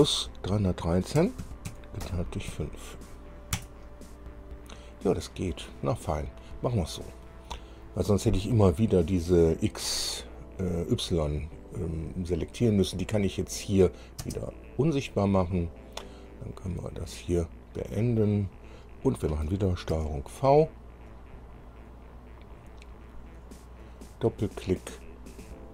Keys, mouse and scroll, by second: 0.2 KP_Add, 1.3 KP_3, 1.6 KP_1, 2.0 KP_3, 2.7 KP_5, 3.7 KP_Enter, 6.9 scroll down 2, 13.3 click, 14.4 space, 16.6 click, 18.1 click, 20.1 ctrl+v, 20.5 ctrl+scroll down 3, 21.3-22.7 drag, 24.0 click, 25.6 click.